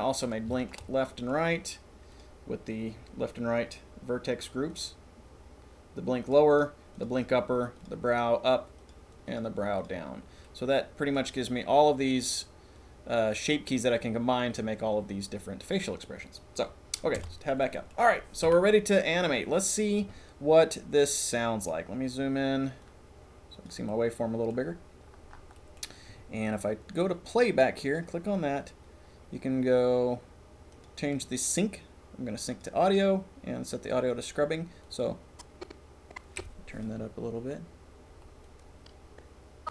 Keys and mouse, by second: 0.5 shift+middle click, 0.8 middle click, 1.1 middle click, 1.3 middle click, 4.8 click, 9.9 middle click, 10.4 middle click, 17.3 Tab, 17.6 middle click, 18.4 KP_1, 22.8-23.7 drag, 23.9 middle click, 25.6 middle click, 27.8-34.5 drag, 34.8-36.8 drag, 38.4-39.5 drag, 39.5 right click.